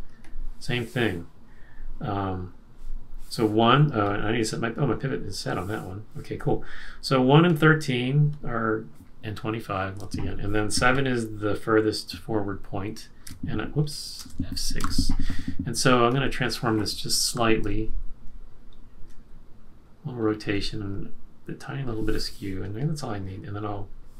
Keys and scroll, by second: 9.9 F6, 13.2 F7, 14.2 super+z, 14.8 F6, 17.3 q.